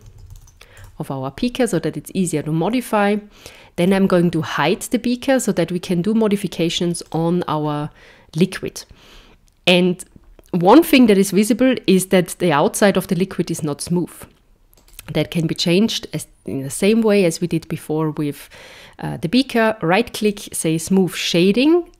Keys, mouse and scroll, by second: 3.8 click, 7.0 click, 14.8 right click.